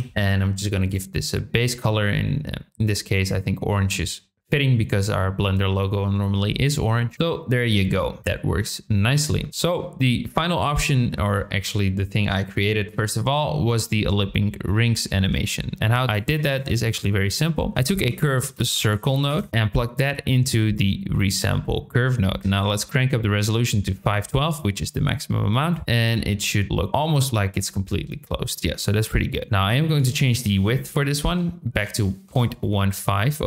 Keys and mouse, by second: 0.8 click, 10.9 shift+middle click, 15.2 shift+a, 20.1-20.7 drag, 21.3-22.1 drag, 22.8-24.4 drag, 25.5 click, 26.1-27.1 drag, 29.5 shift+a, 29.9-32.6 drag.